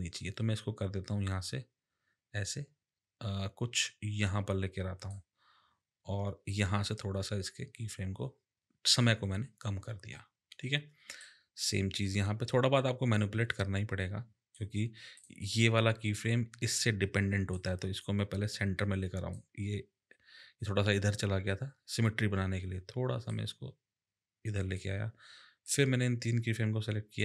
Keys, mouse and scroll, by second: 0.1 click, 6.5 click, 11.1 click, 15.1 click, 17.5 click, 23.3 click, 25.6 click.